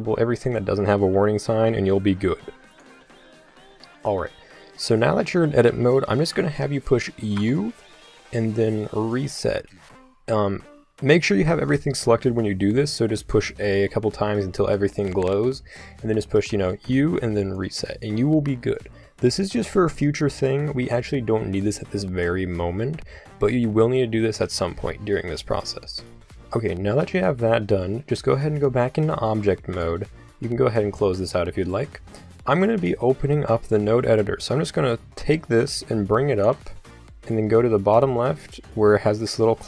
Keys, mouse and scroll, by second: 7.4 u, 11.4 a, 13.3 a, 16.4 u, 26.4 Tab, 29.8 n, 30.5 n, 30.8 n, 34.4-36.4 drag.